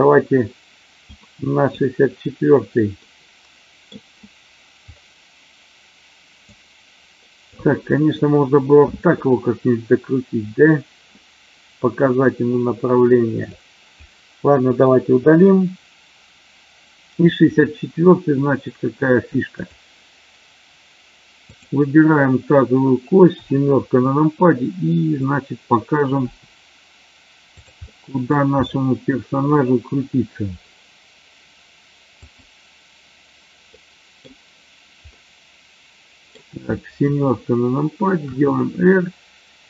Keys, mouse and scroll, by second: 1.2-1.7 drag, 3.0 middle click, 6.7 click, 13.5-14.0 drag, 15.1 Delete, 26.3 r, 27.8 middle click, 32.2 click, 33.7-34.2 middle drag, 35.2-36.3 middle drag, 38.2 r.